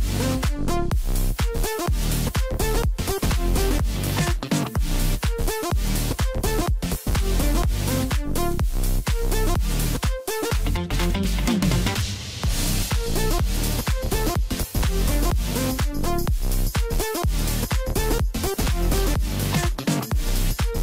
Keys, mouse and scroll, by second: 5.4-6.5 middle drag, 6.5 scroll down 2, 6.8-7.9 middle drag, 7.9-9.2 drag, 9.2-9.9 scroll down 4, 9.9-10.8 scroll up 2, 10.8-16.3 drag, 16.3 scroll down 1, 16.6-17.2 middle drag, 17.2-18.0 scroll up 3, 18.0-18.9 ctrl+KP_8, 19.6-20.0 scroll up 1, 20.0 scroll down 4, 20.3 middle click, 20.7-20.8 scroll up 7.